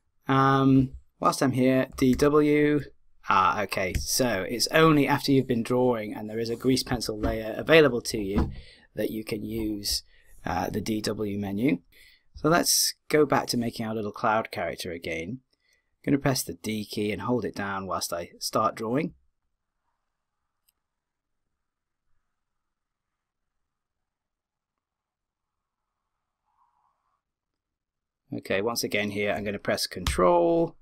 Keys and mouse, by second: 1.9 d, 2.1 w, 19.0 d, 19.4-21.2 drag.